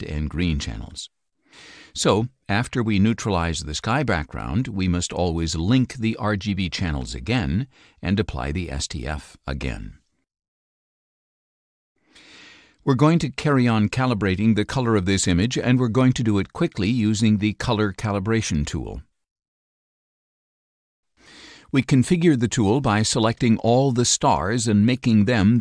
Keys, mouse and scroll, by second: 5.7 click, 8.7 click, 12.6 click, 17.6 click, 20.1 click, 22.9-24.7 drag.